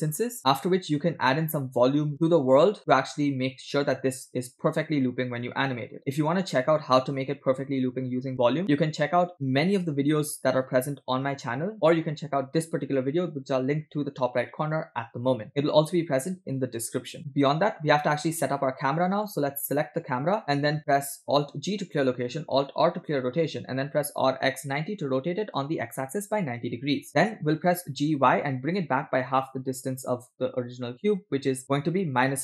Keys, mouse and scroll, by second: 19.0-20.4 middle drag, 20.4 click, 21.7 alt+g, 23.0 alt+r, 24.3 r, 28.0 g.